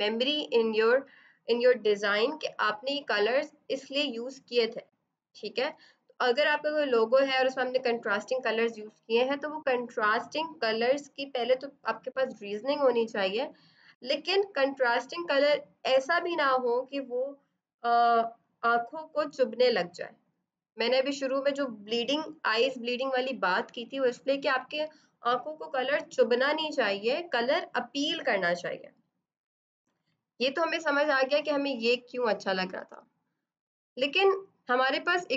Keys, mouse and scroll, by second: 32.7 F7.